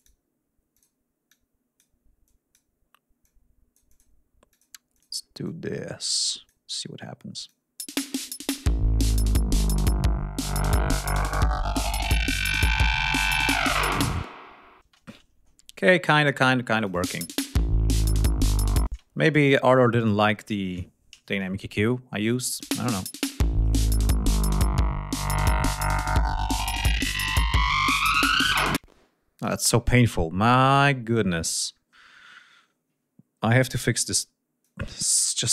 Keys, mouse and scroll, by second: 0.7 click, 1.2 click, 2.2 click, 3.1 click, 4.4 click, 4.8 click, 5.4-6.6 drag, 7.3 click, 7.7 space, 14.7 space, 15.1 ctrl+scroll down 2, 16.7 click, 16.9 space, 18.8 space, 19.2 scroll up 2, 19.9 click, 22.4 click, 22.6 space, 23.6 right click, 26.7 click, 28.7 space, 29.3 click, 31.4 ctrl+scroll up 2, 33.3 r, 33.7 click.